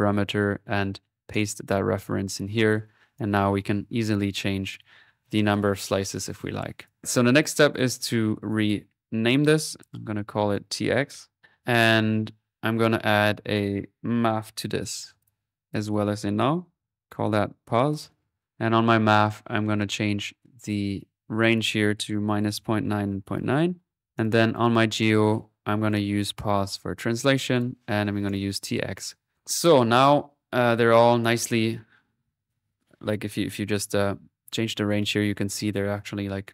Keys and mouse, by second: 0.4 right click, 1.3 click, 2.1-3.2 middle drag, 3.2-5.6 drag, 5.7 ctrl+z, 6.8 ctrl+click, 7.7-9.2 drag, 9.9 ctrl+z, 10.4 ctrl+click, 11.4 middle click, 11.8 click, 12.5 click, 13.5 right click, 14.1-15.0 typing, 15.7 click, 16.7 alt+n, 18.4-20.1 drag, 21.4 click, 24.0-25.8 drag, 25.9-29.3 drag, 26.8 typing, 33.1 click, 33.7-35.8 drag.